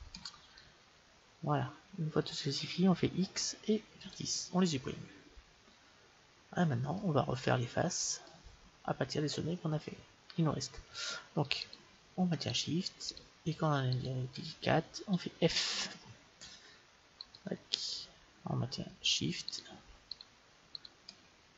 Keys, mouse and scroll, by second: 0.6-2.3 middle drag, 3.2 x, 7.0-11.4 middle drag, 11.7-15.9 right drag, 15.5 f, 17.2-19.2 right drag, 19.5-21.5 right drag.